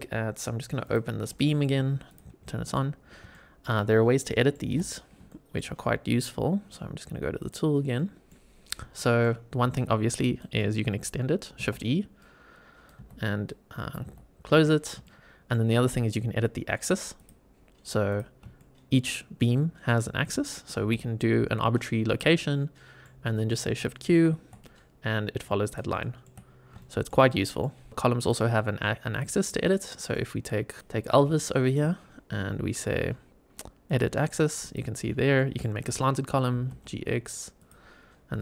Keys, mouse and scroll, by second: 0.7 click, 1.3 shift+middle drag, 2.0 click, 2.3-2.6 middle drag, 2.8 scroll up 2, 3.2 shift+middle drag, 3.7 scroll down 2, 4.2 middle drag, 4.4 scroll down 1, 4.6 n, 5.2 shift+middle drag, 7.3 click, 7.9-8.2 middle drag, 8.6 scroll down 1, 8.9 shift+middle drag, 9.7 shift+right click, 10.7 scroll up 2, 11.5 shift+e, 12.1 shift+right click, 12.9 shift+e, 13.4 shift+right click, 13.9 shift+e, 15.0-15.5 middle drag, 17.1 click, 18.0 click, 18.5 shift+middle click, 19.3 middle click, 20.7 g, 22.0 click, 22.3 middle click, 23.1 middle click, 23.1 scroll down 1, 24.0 shift+q, 24.5-25.3 middle drag, 25.6 click, 25.9 shift+middle drag, 26.3 scroll up 3, 26.7-27.0 shift+middle drag, 27.2 middle click, 27.9 scroll down 2, 28.1 click, 28.5 scroll up 2, 29.0 click, 29.4-30.0 middle drag, 30.8 shift+right click, 30.8 shift+e, 30.9 scroll up 2, 31.3 shift+middle click, 33.8 click, 34.6 click, 34.9-35.3 scroll down 1, 35.3 middle click, 36.4 g, 36.6 x, 37.5 click.